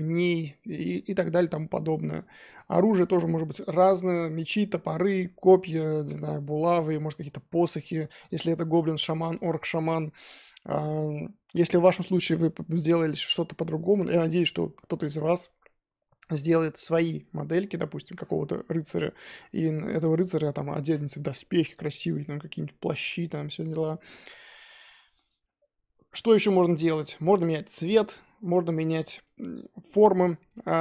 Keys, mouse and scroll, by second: 17.5 scroll down 2, 20.1-21.9 scroll up 1, 27.2-28.9 scroll up 1, 28.9-30.1 scroll up 4, 29.0-29.3 middle drag, 30.1 scroll down 4, 30.2-30.8 middle drag.